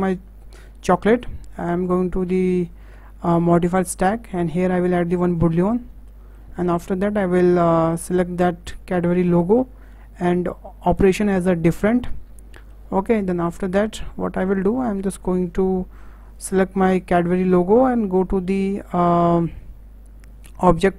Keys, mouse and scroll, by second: 1.5 click, 2.5 click, 3.9-6.1 drag, 6.1-8.0 shift+middle drag, 8.0 click, 12.3 scroll down 2, 12.5 shift+middle click, 13.5 click, 14.5 click, 17.8 click.